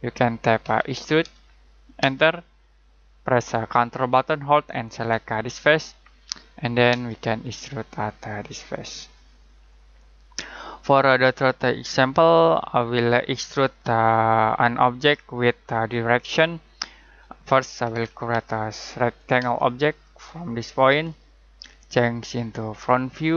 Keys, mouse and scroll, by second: 0.6-0.9 typing, 2.0 space, 5.6 ctrl+click, 6.9 ctrl+space, 8.9 ctrl+click, 9.5-9.9 ctrl+scroll down 1, 9.9 ctrl+middle click, 10.8-12.9 ctrl+scroll down 1, 17.6-19.4 typing, 19.9 click.